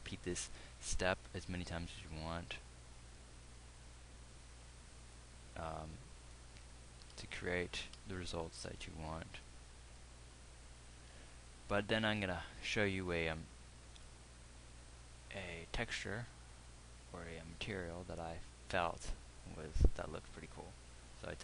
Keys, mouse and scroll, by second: 8.4 KP_1.